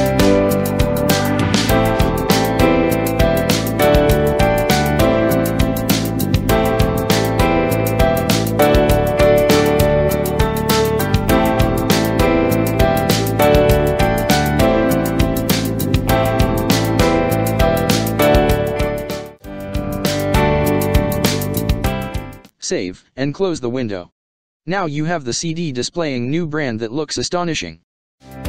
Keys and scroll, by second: 4.0 ctrl+v, 5.8 ctrl+t, 9.2 space, 9.9 ctrl+space, 23.2 ctrl+s, 25.9 space, 26.4 ctrl+space, 27.9 space.